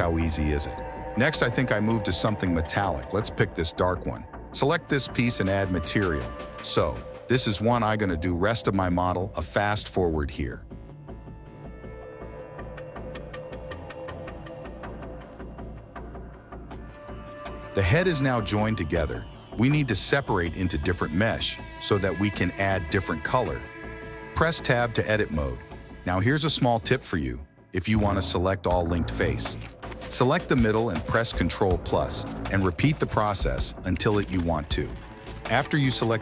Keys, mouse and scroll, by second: 0.1-1.2 middle drag, 1.2 click, 1.3-2.3 middle drag, 2.3 click, 3.2 middle click, 3.6-4.6 drag, 4.6 middle click, 5.2 middle click, 7.4 click, 8.2 click, 9.1 click, 9.4-10.0 middle drag, 10.2-10.7 middle drag, 10.8 middle click, 11.5 middle click, 12.2 click, 12.5 click, 12.8 click, 13.1 click, 13.4 click, 14.0 click, 14.4 click, 14.8 click, 15.1 click, 15.6 middle click, 16.0 middle click, 18.6-20.0 shift+middle drag, 20.1 middle click, 20.3 middle click, 22.2 Tab, 24.0 middle click, 24.3-26.7 middle drag, 26.7 click, 26.9 middle click, 28.8 ctrl+KP_Add, 29.3 ctrl+KP_Add, 29.6 ctrl+KP_Add, 29.7 ctrl+KP_Add, 29.8-30.2 ctrl+KP_Add, 30.4 ctrl+KP_Add, 30.5 ctrl+KP_Add, 30.6 ctrl+KP_Add, 31.1 ctrl+KP_Add, 31.4 ctrl+KP_Add, 33.6 ctrl+KP_Add, 34.0 ctrl+KP_Add, 34.3 ctrl+KP_Add, 34.8 ctrl+KP_Add, 35.1 ctrl+KP_Add, 36.0 p.